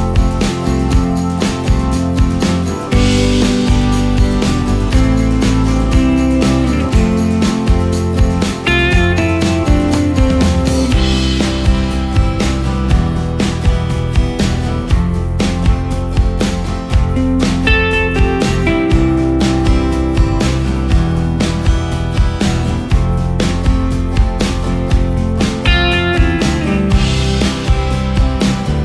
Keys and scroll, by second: 12.4 ctrl+space, 13.0 ctrl+space, 16.8 ctrl+space, 17.8 ctrl+space, 20.7 ctrl+space, 23.1 |, 27.7 ctrl+space.